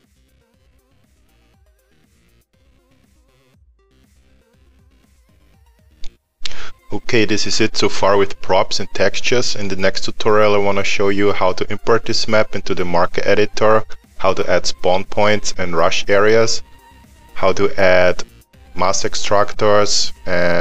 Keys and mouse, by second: 0.0 Delete, 0.1 click, 0.2 Delete, 0.4 click, 0.5 Delete, 0.6 middle click, 0.8 click, 0.9 Delete, 1.1 middle click, 1.3 click, 1.4 Delete, 1.4 click, 1.5 middle click, 2.9 click, 3.1 middle click, 3.4 click, 3.6 middle click, 4.0 click, 4.6 click, 4.9 middle click.